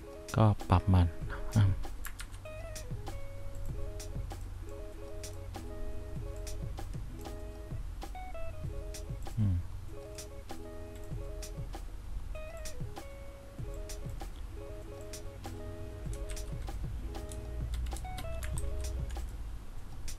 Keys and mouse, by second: 2.3 ctrl+z, 16.4 shift+s, 18.7 ctrl+z.